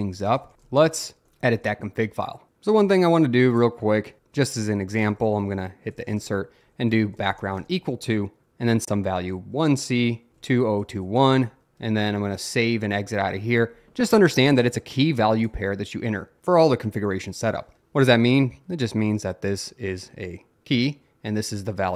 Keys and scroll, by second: 0.0-1.7 typing, 3.9-12.3 typing.